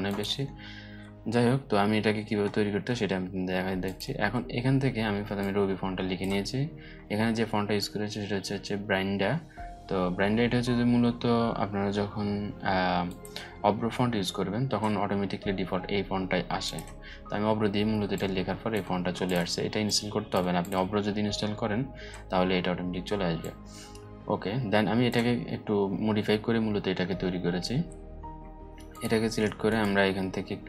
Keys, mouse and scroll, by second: 2.0-2.6 alt+scroll down 2, 2.6-3.4 scroll up 2, 3.4-5.9 drag, 16.2-18.3 drag, 22.9-24.8 drag, 25.1-25.7 alt+scroll up 2, 26.9-28.4 alt+scroll up 2, 28.4 click, 29.2-30.6 right drag.